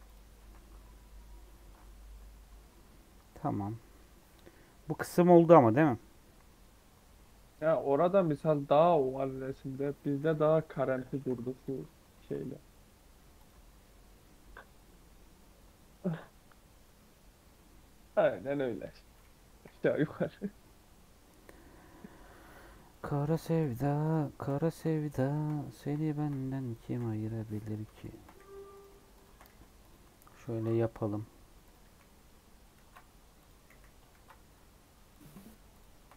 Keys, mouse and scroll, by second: 0.4 ctrl+2, 1.4 ctrl+3, 2.0 Tab, 2.3 Tab, 2.6-3.7 middle drag, 3.7 scroll down 1, 6.8 middle click, 8.2-10.4 middle drag, 10.4 Tab, 10.6 scroll up 1, 10.7 middle click, 11.1 2, 11.6 alt+click, 12.1 g, 13.5 Tab, 16.7 scroll down 2, 16.9-18.1 middle drag, 18.1 Tab, 18.4-19.5 middle drag, 19.5 KP_1, 20.5-21.3 scroll up 8, 22.2 2, 23.3 1, 23.5-26.9 drag, 26.9 f, 27.6 click, 28.3 f, 28.7 click, 29.4 f, 29.8 click, 30.7 f, 31.4 2, 31.6 click, 31.8 f, 32.7 ctrl+z, 33.3 click, 33.6 f, 34.1 ctrl+z, 35.1-36.1 drag.